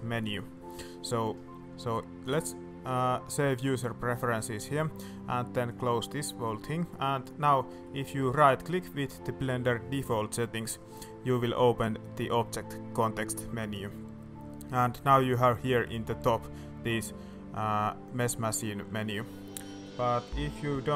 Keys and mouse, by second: 6.2-6.5 middle drag, 6.8 middle drag, 7.7 middle click, 8.4-19.1 drag, 19.7 middle click.